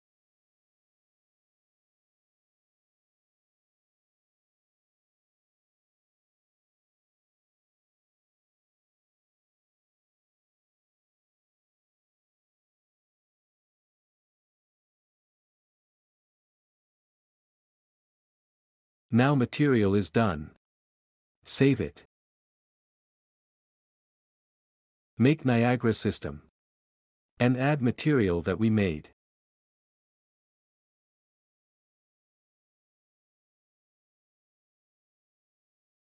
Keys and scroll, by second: 1.3 typing, 2.6 typing, 6.0-7.6 typing, 10.9 typing, 15.6 ., 17.5-18.2 typing.